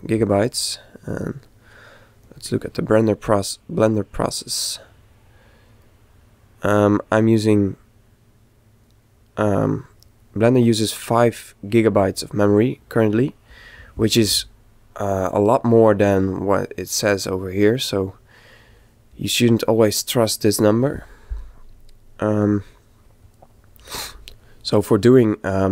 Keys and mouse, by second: 14.4 click.